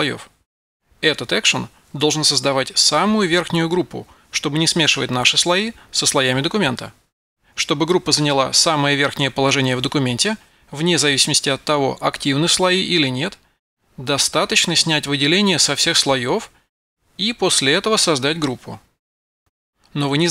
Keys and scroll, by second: 0.0-1.4 typing, 17.9 super+v, 18.7 Return.